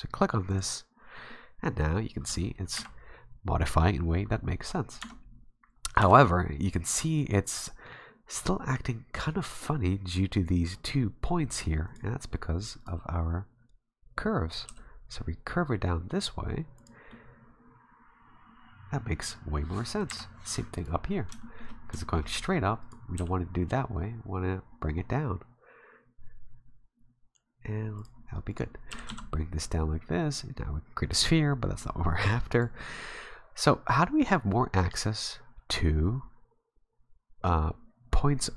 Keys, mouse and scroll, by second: 0.5 click, 1.3-1.6 scroll up 1, 1.6 middle click, 2.8 KP_1, 5.0 Tab, 6.0 Tab, 6.9 Tab, 11.9 right click, 12.8 right click, 14.7 g, 15.8 r, 17.1 middle click, 19.8-20.1 typing, 20.8 right click, 21.4 shift+middle click, 22.0 shift+middle click, 22.8 right click, 23.3 g, 28.5 right click, 28.9 g, 31.5 r, 33.4-33.9 scroll down 4, 33.8 scroll up 1, 33.9 middle click.